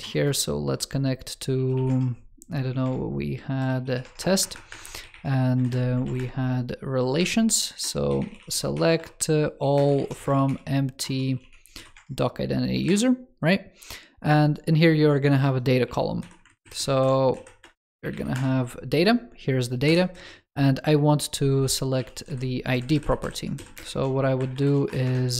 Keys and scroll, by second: 16.3 alt+Left, 16.8 alt+Left, 22.6 alt+Left, 23.1 alt+Left.